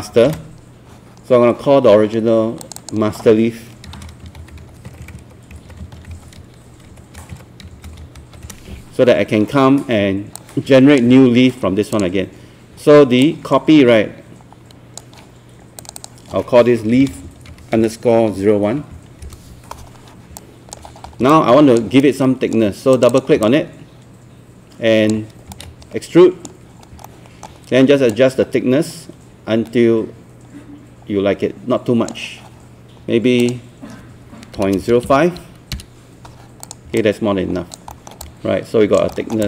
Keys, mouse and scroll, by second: 0.3 ctrl+space, 2.6 click, 3.8-8.7 typing, 10.4-15.2 drag, 16.8-18.8 typing, 19.2 Return, 20.4 alt+click, 20.9 scroll up 1, 21.3 alt+click, 22.0 right click, 23.0 click, 23.4 alt+click, 25.9 shift+right click, 27.1 alt+middle click, 28.1-32.6 drag, 34.6 KP_Decimal, 34.8 KP_0, 35.1 KP_5, 36.6 click, 37.0 alt+click, 37.9 alt+middle click, 38.2 alt+click, 39.2 alt+middle click.